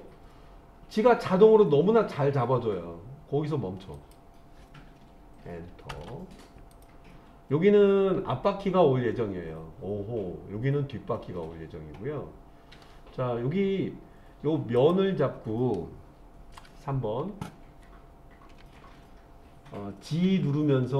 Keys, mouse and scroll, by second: 5.9 Return, 6.7 click, 14.8 click, 16.5 KP_3, 20.2 g.